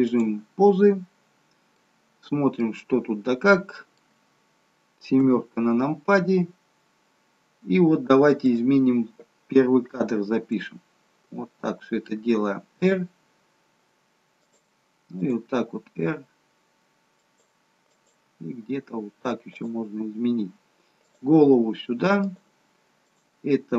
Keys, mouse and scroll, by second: 1.8 middle click, 2.9-3.5 scroll down 7, 3.5 middle click, 5.1 KP_7, 6.5-8.2 scroll up 3, 8.4 click, 12.8 r, 15.4 click, 15.4 r, 17.9 click, 18.2 r, 21.1 click, 21.4 r, 23.1 click.